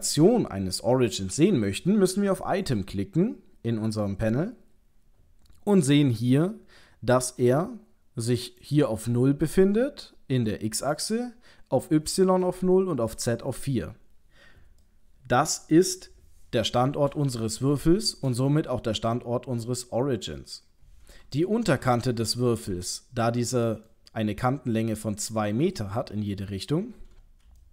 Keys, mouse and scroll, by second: 2.7 click, 8.6 click, 14.9 middle click, 17.4 shift+middle click, 20.4 middle click, 23.7 middle click, 26.1 KP_3, 26.9-27.6 scroll up 9, 27.6 shift+middle click.